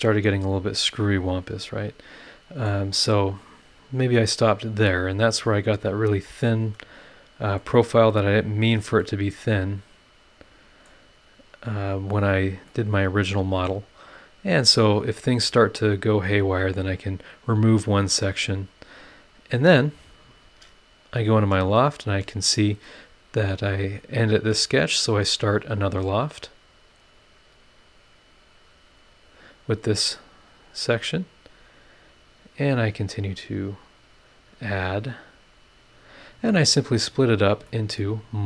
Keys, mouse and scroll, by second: 2.9 scroll down 1, 3.3 scroll up 1, 4.9-7.6 middle drag, 5.1-7.6 right drag, 7.6 click, 8.9 scroll up 1, 9.0-11.0 middle drag, 9.0-11.0 drag, 9.0-11.0 right drag, 12.1 scroll down 2, 12.7-13.8 middle drag, 12.7-13.8 drag, 12.7-13.8 right drag, 16.0 right click, 16.8 click, 18.4 click, 20.1 click, 20.4 scroll down 1, 21.1 click, 21.4 space, 29.0 click, 30.3 click, 30.8 scroll up 1, 31.3 click, 32.5 click, 33.5 click, 34.6 click, 36.0 click, 36.5 scroll down 1, 37.2-37.5 scroll up 1, 37.7 middle click.